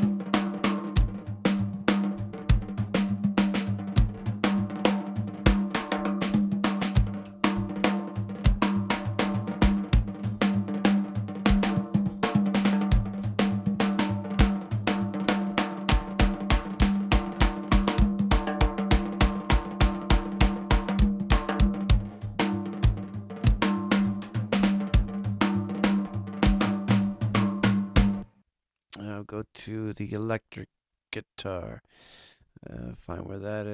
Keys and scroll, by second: 27.9 space, 29.7 super+=.